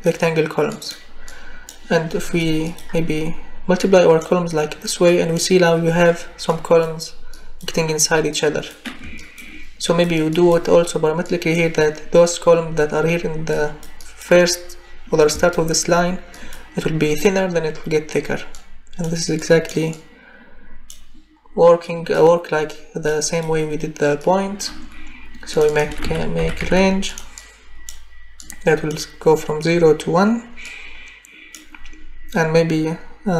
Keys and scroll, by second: 25.8 r, 26.0 a, 26.4 n, 26.6 g.